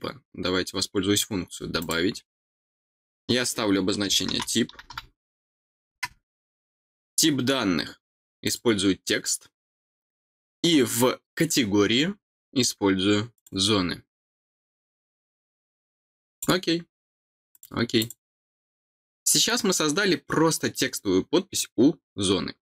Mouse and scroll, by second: 1.8 click, 7.0 click, 8.4 click, 11.5-13.3 scroll down 4, 13.3 click, 16.3 click, 17.5 click, 18.0 click.